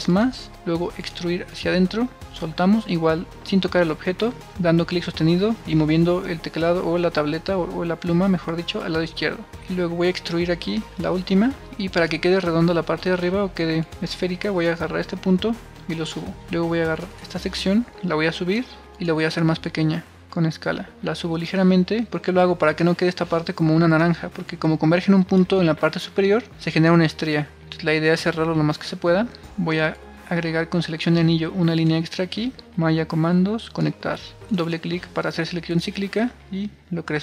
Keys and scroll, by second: 27.4 super+r.